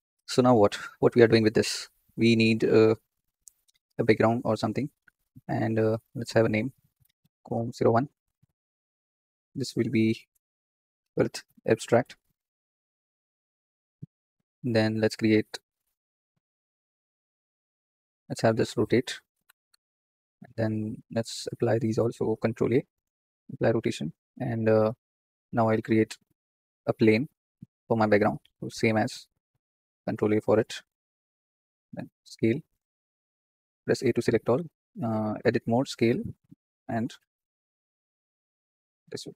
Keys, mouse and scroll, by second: 0.0 ctrl+space, 2.8 n, 4.0-5.9 drag, 6.7-9.3 drag, 12.0-14.8 drag, 15.5-18.0 middle drag, 18.0 click, 18.6 r, 20.8-23.5 drag, 23.5 ctrl+a, 26.0 KP_1, 26.2-26.7 scroll down 6, 27.5 shift+a, 28.5 r, 31.3 ctrl+a, 31.8 Tab, 33.5 a, 34.5 s, 36.8-39.3 drag.